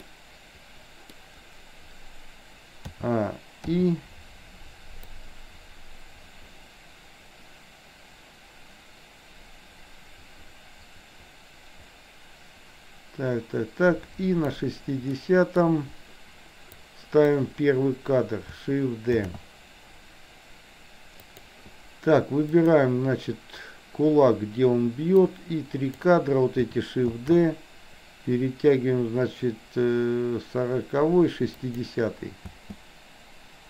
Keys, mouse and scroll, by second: 0.2-1.2 middle drag, 3.0 a, 3.7 i, 5.2-14.6 drag, 15.2 middle click, 16.7 click, 19.2 shift+d, 22.6 click, 25.2-26.0 drag, 27.2 shift+d, 32.6 space.